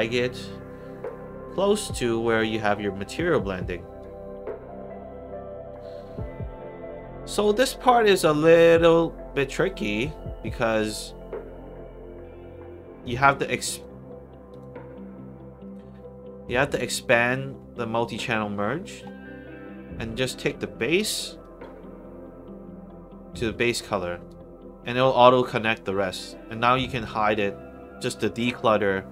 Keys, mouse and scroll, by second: 0.4 scroll up 2, 1.0 click, 2.2 scroll up 2, 2.7 middle click, 3.0-3.9 scroll up 1, 3.9 click, 4.7 middle click, 13.6 click, 14.4 click, 16.6 click, 17.3 middle click, 19.9 middle click, 21.3-23.4 drag, 28.3 click.